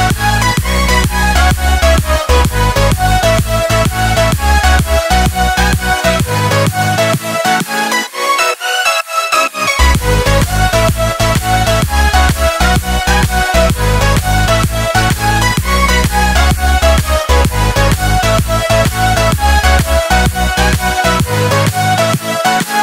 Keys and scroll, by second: 5.2 Up, 5.9 Left, 8.4 Down, 8.9 Down, 8.9 Left, 9.4 Left, 10.7 Up, 12.3 ctrl+shift+Up, 20.4 Up.